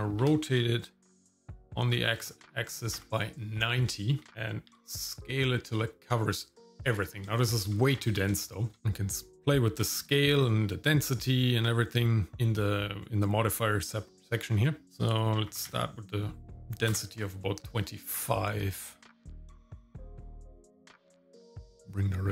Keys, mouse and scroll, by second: 0.2 r, 4.2 shift+middle click, 4.7 s, 7.3 shift+middle click, 7.8-8.2 scroll up 2, 8.4 shift+middle click, 8.8 KP_0, 14.8-17.0 drag, 21.8-22.3 shift+drag.